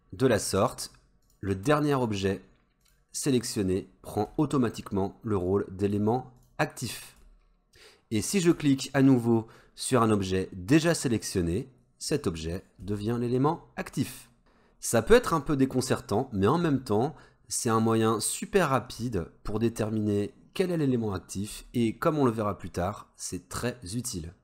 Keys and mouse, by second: 0.6 shift+click, 1.3 shift+click, 2.0 shift+click, 2.8 shift+click, 3.5 shift+click, 6.4 shift+click, 12.1 shift+click, 20.7 shift+click.